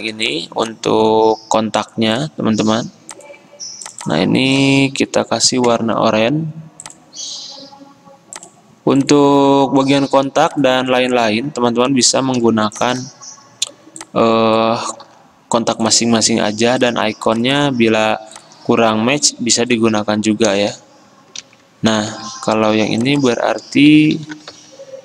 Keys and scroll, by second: 9.8 Escape, 12.5 t, 15.2 ctrl+c, 19.4 t, 20.7 Return, 21.5 ctrl+v, 22.2 ctrl+a, 24.1-25.0 typing.